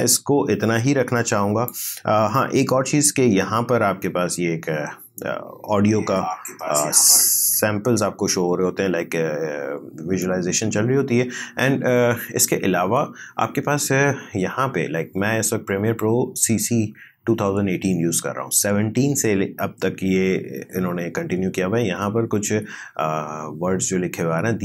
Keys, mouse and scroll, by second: 0.1-4.0 drag, 5.7 space.